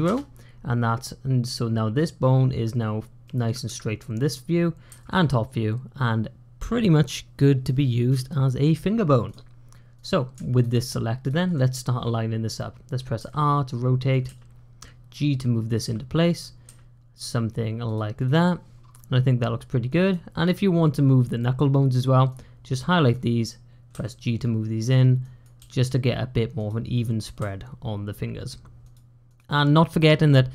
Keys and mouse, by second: 3.1 click, 3.5 `, 4.8 `, 10.4 shift+click, 11.1 shift+click, 13.0 r, 14.1 g, 15.7 r, 16.5 g, 18.0 click, 19.7 click, 22.2 click, 23.8 g, 25.1 click, 25.4 g, 26.9 click, 27.2 g, 29.1 click.